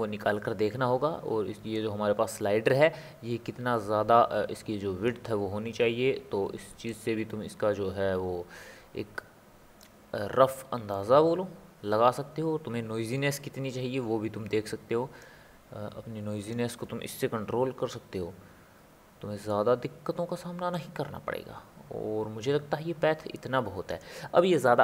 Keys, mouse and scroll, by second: 1.7-4.9 drag, 6.9-10.0 drag, 10.9-14.2 drag, 16.4-19.4 drag, 20.7-23.9 drag.